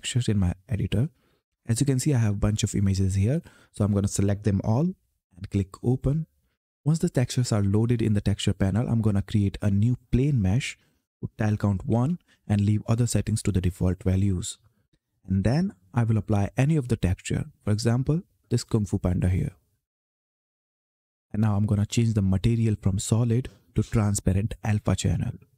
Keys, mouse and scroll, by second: 1.4-3.1 scroll down 1, 3.1 click, 4.5 ctrl+a, 5.7 click, 9.9 click, 14.1 click, 17.5 click.